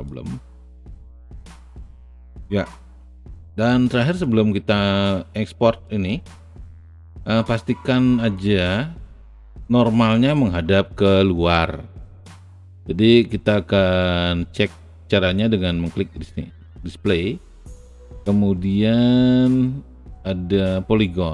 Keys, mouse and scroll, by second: 0.0-1.2 alt+drag, 1.2 alt+right click, 1.5 alt+middle click, 2.3 alt+click, 3.6 alt+right click, 4.2-6.0 alt+drag, 6.0-7.2 alt+middle drag, 8.3-9.8 alt+drag.